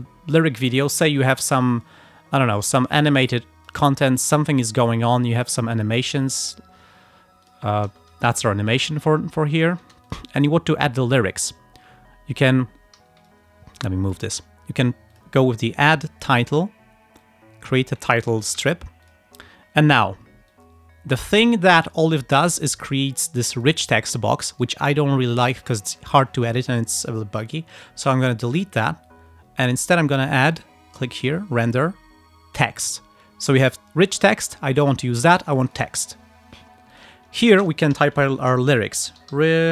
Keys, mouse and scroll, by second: 0.9 click, 1.7 click, 2.8 click, 3.4 click, 4.2 click, 4.6 click, 5.5 click, 7.5 click, 8.0 space, 9.0 ctrl+scroll down 2, 9.9 ctrl+space, 10.1 ctrl+click, 13.3-14.4 alt+drag, 15.2 click, 16.6 click, 17.3 click, 18.7 v, 19.1 click, 20.6-22.2 drag, 23.6 click, 24.6 right click, 28.6 click, 30.2 click, 35.8 click, 37.0 click, 38.0 ctrl+a, 38.8-39.7 typing.